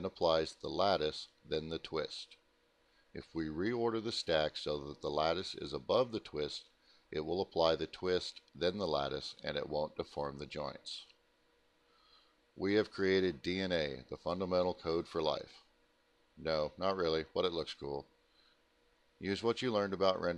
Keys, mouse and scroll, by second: 3.7 click, 4.8 click, 8.4 middle click, 8.6 scroll down 2, 8.9 alt+middle click, 10.0 middle click, 10.0 scroll up 1, 10.1 middle click, 10.5 middle click, 11.3 click, 12.1 middle click, 13.4 ctrl+alt+middle click, 14.5 middle click.